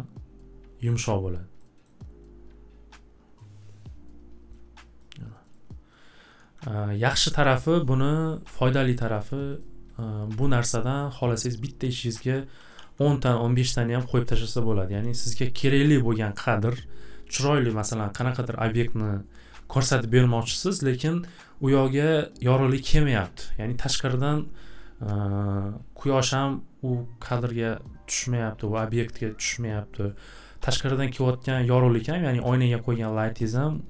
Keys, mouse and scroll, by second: 0.9-1.7 scroll, 1.8 scroll, 5.0 click, 5.5 click, 8.5 click, 9.0 click, 9.2 click, 9.6 click, 10.0 click, 11.6 click, 12.1 click, 12.6 alt+w, 12.8 alt+w, 15.1 click, 30.2 click.